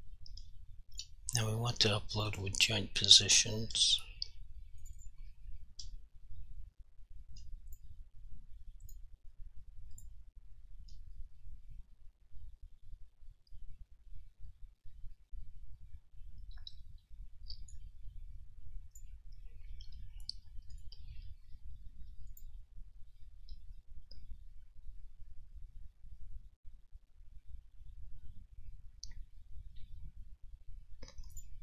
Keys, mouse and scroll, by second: 2.3 click, 2.4 double click, 4.0 0, 4.9 click, 5.1 double click, 7.8 click, 17.9 click, 20.8 click, 31.5 click.